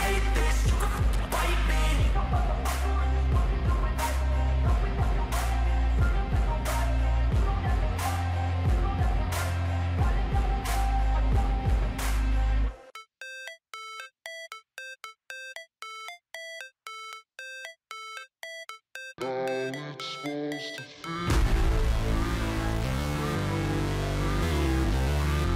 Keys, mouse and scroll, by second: 5.6 Left, 6.2 Left, 11.5 shift+click, 12.1 scroll down 3.